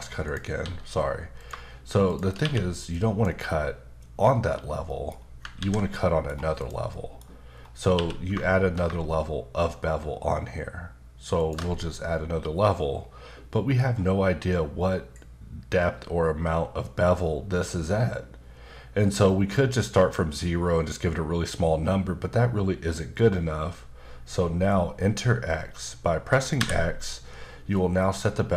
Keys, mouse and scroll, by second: 0.2 click, 0.6 s, 1.4 click, 2.1 shift+click, 2.4 q, 2.9 click, 4.8 middle click, 5.1 scroll up 2, 5.6 ctrl+z, 5.9 middle click, 6.6 click, 6.9 middle click, 7.5-7.9 scroll down 1, 7.9 q, 11.4 ctrl+shift+click, 26.6 x, 27.7 middle click.